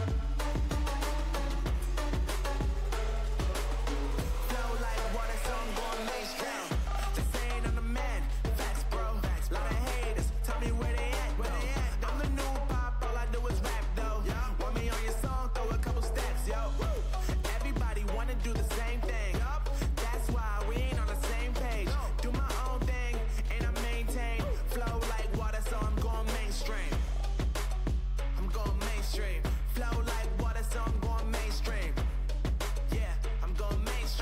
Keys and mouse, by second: 3.5-4.5 middle drag, 4.5-6.9 right drag, 5.5 x, 7.8-14.4 right drag, 14.4 e, 16.4 middle click, 17.2-18.8 drag, 18.8-20.4 right drag, 20.4 e, 22.7 middle click, 23.4 a, 23.7 a, 23.8 z, 27.6 a, 27.8 a, 28.4 w, 31.0 click, 31.8 z, 34.0 f.